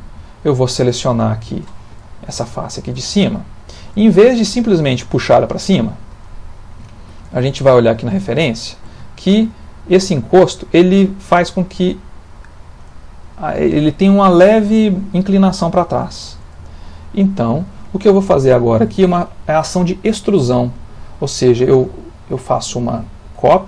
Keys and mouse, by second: 0.9 click, 2.6 shift+middle click, 2.9 middle click, 4.2 ctrl+middle click, 5.0 click, 7.0 ctrl+middle click, 7.4 shift+middle click, 7.9 middle click, 8.5 shift+middle click, 9.0 ctrl+middle click, 9.4 shift+middle click, 10.2 ctrl+middle click, 16.1 shift+middle click, 16.7 ctrl+middle click, 18.2 shift+middle click.